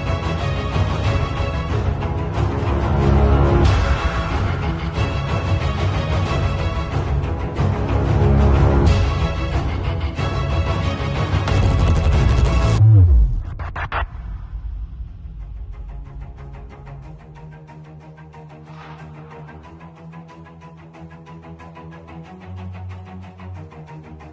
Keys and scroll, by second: 1.9 z, 2.4 space, 2.8 v, 4.4 space, 4.9 shift+super+a, 23.3 b, 24.1 x.